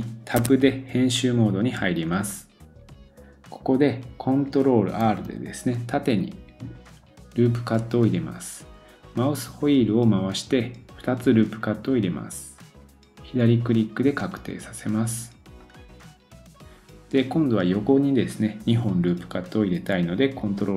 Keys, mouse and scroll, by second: 0.4 Tab, 5.1 ctrl+r.